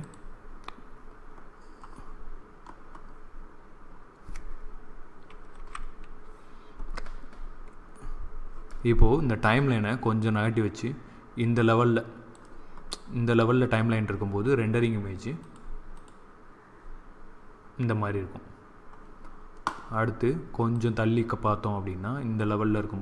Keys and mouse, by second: 1.9 middle click, 3.3-5.4 middle drag, 5.4 t, 7.7 middle click, 9.5-11.3 drag, 20.6 click, 22.3-23.0 drag.